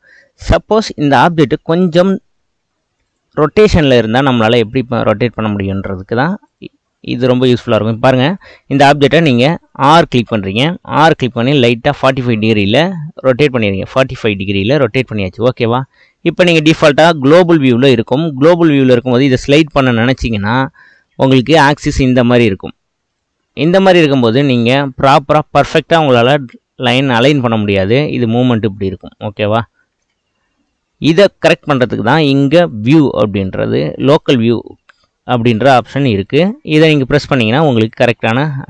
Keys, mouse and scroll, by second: 0.2-3.0 middle drag, 3.0 click, 3.9 click, 4.7 click, 6.4-7.9 drag, 8.3 click, 9.2 shift+drag, 10.6 r, 15.1-16.2 middle drag, 16.2 click, 16.6-19.1 middle drag, 19.1 click, 19.5-23.1 middle drag, 23.1 click, 24.8 click, 30.0 ctrl+z, 30.6-32.6 middle drag, 32.6-34.8 drag, 34.8-36.1 middle drag, 36.1 click, 37.9 click.